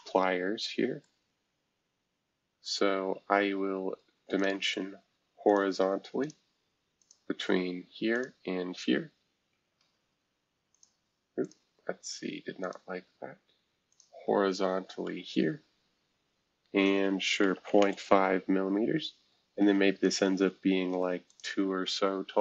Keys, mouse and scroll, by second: 1.0-2.5 middle drag, 4.4 click, 5.5 click, 6.2 click, 7.0 click, 8.1 shift+click, 9.5 shift+h, 10.7-15.0 drag, 15.0 typing, 17.4-18.3 typing, 20.0-22.4 drag.